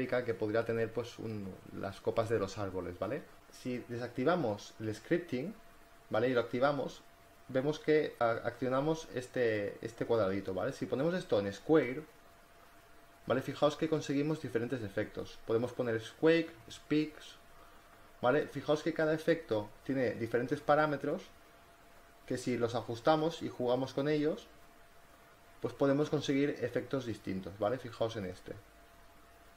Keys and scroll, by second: 0.0 ctrl+z, 11.3 space, 15.9 space, 25.2 space.